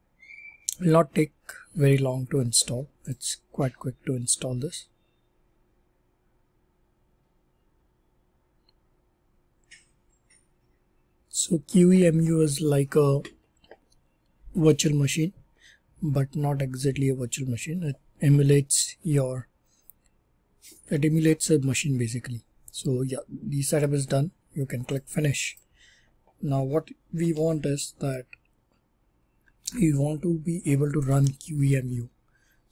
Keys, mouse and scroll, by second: 3.0 click, 25.5 click, 29.5 super+e, 31.0 click, 31.2 click, 32.5-32.7 typing.